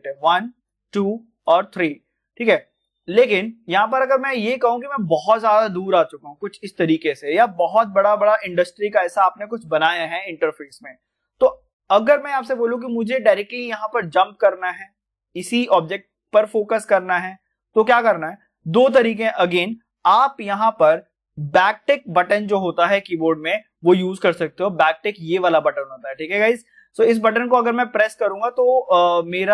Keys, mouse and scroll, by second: 3.9 middle click, 4.6-4.9 scroll down 1, 5.3-11.9 middle drag, 11.9 click, 24.0 click, 24.0 click, 28.4 click.